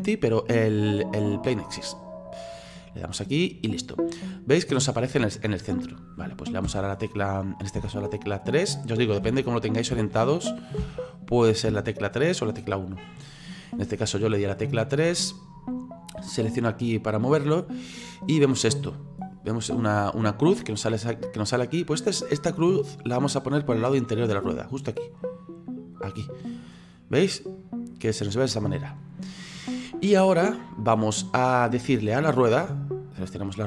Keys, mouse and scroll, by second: 3.3-3.8 scroll down 3, 3.8-6.7 middle drag, 6.7 KP_1, 7.8 KP_3, 9.2 KP_1, 9.9 KP_3, 10.8 KP_1, 11.7 KP_3, 14.4-16.6 scroll up 4, 16.6 click, 18.1-26.7 drag, 26.7-29.8 middle drag, 29.8-32.9 scroll down 4, 33.1 right click.